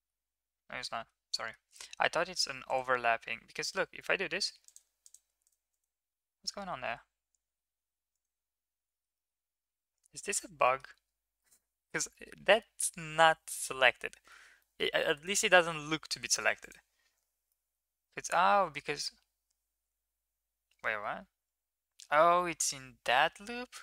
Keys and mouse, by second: 0.3 ctrl+z, 0.8 middle drag, 1.3 middle click, 5.7 click, 6.3 middle click, 6.7 a, 7.4 m, 8.9 shift+middle click, 9.2 middle click, 10.6 middle click, 11.4 middle click, 12.1 shift+middle click, 12.4 middle drag, 13.6-14.3 middle drag, 14.6 middle drag, 15.3 shift+middle drag, 15.7 middle drag, 16.6 alt+click, 17.5-22.0 middle drag.